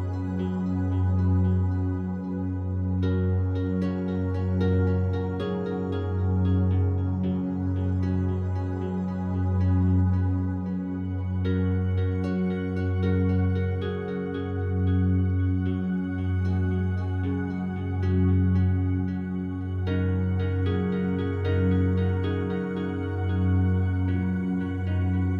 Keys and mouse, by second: 1.0 alt+click, 1.9 alt+click, 2.8 click, 4.3 alt+click, 5.2-8.0 drag, 8.7 click, 9.3 alt+click, 9.8 alt+shift+click, 10.2 alt+click, 11.5-13.0 alt+drag, 14.3 click, 15.5 click, 16.1-17.3 alt+drag, 17.7 alt+shift+click, 18.1 alt+click, 19.0 click, 19.6 ctrl+alt+click, 20.3 click, 20.7 shift+click, 21.3 alt+click, 22.2 click, 22.4 click, 23.6 r, 23.9 x, 24.8 click.